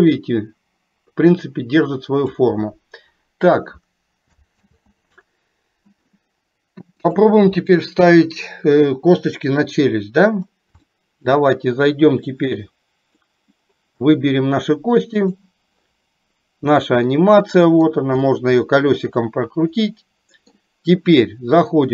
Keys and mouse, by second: 4.8 ctrl+z, 7.1 click, 10.8 shift+middle click, 12.6 click, 15.3 click, 16.9 middle click, 20.1 middle click.